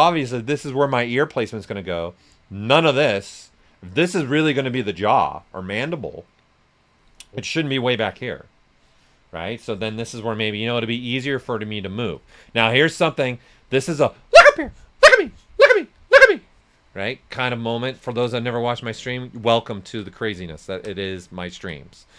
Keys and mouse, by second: 9.3-10.6 typing, 12.1 s, 12.3-17.9 drag, 15.7 typing, 17.9 ctrl+z, 17.9 typing, 18.6 alt+right click, 19.6-20.4 typing.